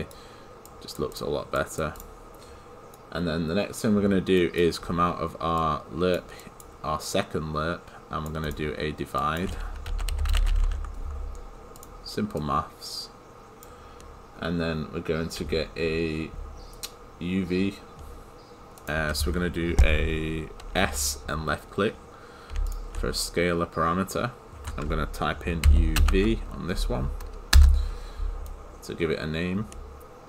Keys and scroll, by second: 27.6 Return.